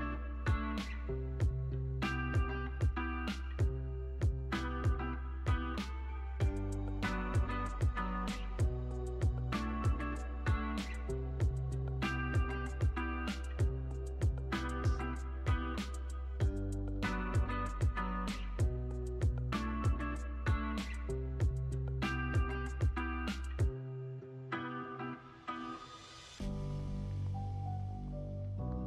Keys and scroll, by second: 1.8 super+s, 3.7 space, 6.9 space, 9.7 super+c, 10.9 super+v, 14.0 super+v, 14.4 super+s, 17.5 space, 24.2 space, 27.6 alt+w.